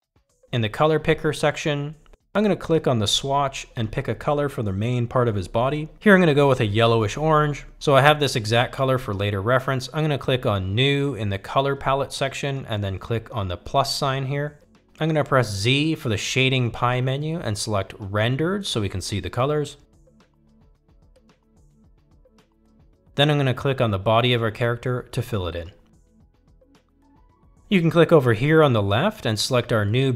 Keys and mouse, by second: 3.4-4.8 drag, 9.1-10.2 drag, 10.9 click, 12.1 click, 17.5 z, 27.1 click.